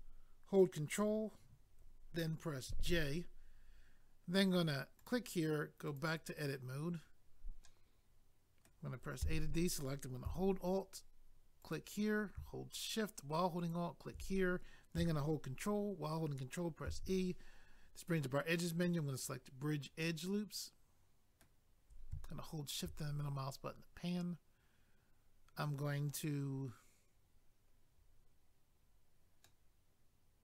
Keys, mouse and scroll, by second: 5.0 click, 5.1 click, 5.9 click, 6.0 click, 7.6 middle click, 9.2 a, 11.6 alt+click, 11.7 alt+click, 13.6 alt+click, 13.7 alt+click, 16.9 ctrl+e, 19.1 click, 19.3 click, 20.0 middle click, 22.2 shift+middle click, 23.1-24.7 scroll up 1, 29.4 middle click.